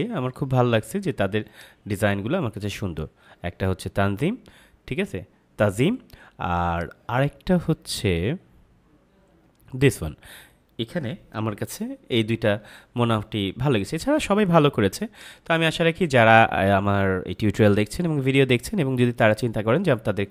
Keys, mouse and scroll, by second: 1.4 scroll down 1, 1.4 click, 6.6 click, 7.2 scroll down 1, 9.7 click, 15.1 click, 16.4-18.2 scroll down 1.